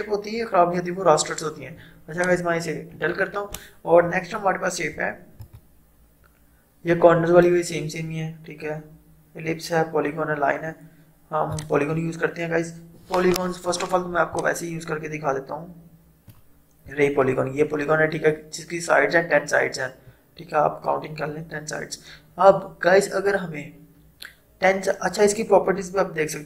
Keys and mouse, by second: 2.2 click, 3.0 Delete, 5.5 right click, 11.6 click, 14.4-18.9 drag.